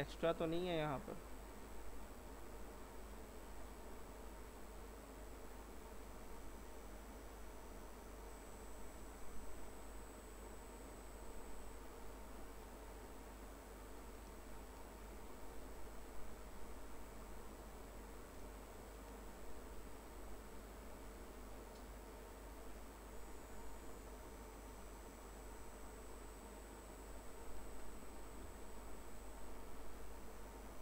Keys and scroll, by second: 28.5 Delete.